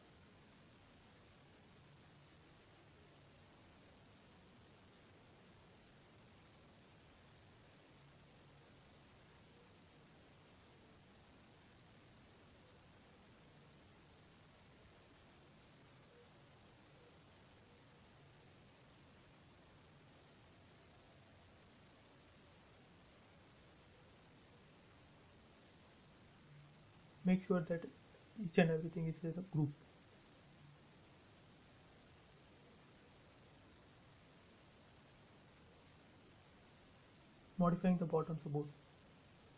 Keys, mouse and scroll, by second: 0.2 m, 0.3 click, 1.3 Up, 2.7 3, 2.9 Return, 3.9 space, 4.8 ctrl+z, 5.7 m, 5.9 click, 6.9 Up, 9.1-11.2 typing, 9.8 Return, 11.3 click, 13.3 Up, 14.0 Escape, 14.6-15.0 scroll up 1, 15.0 space, 15.2-15.7 scroll up 1, 16.9 middle click, 17.0 middle click, 17.9 click, 18.6 m, 18.7 click, 19.7 Up, 22.9 space, 23.2 middle click, 23.8 scroll up 1, 24.5 m, 25.0 click, 26.9 click, 27.0 space, 27.3 middle click, 27.9 scroll down 1, 28.2 shift+middle click, 28.7 scroll down 1, 29.1 click, 29.5 middle click, 30.1 scroll up 1, 31.1 shift+middle click, 32.0 click, 33.5 scroll up 1, 33.8 shift+middle click, 33.9 shift+middle click, 34.3-35.1 scroll up 1, 35.1 click, 36.0 f, 36.6 click, 37.8 space, 38.1-38.5 scroll up 1, 38.5-39.5 middle drag.